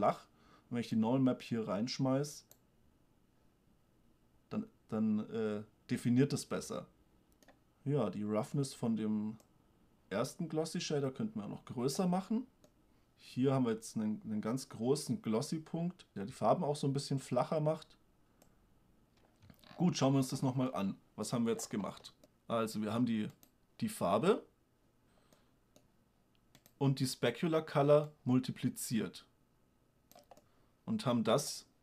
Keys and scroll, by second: 19.3 shift+space.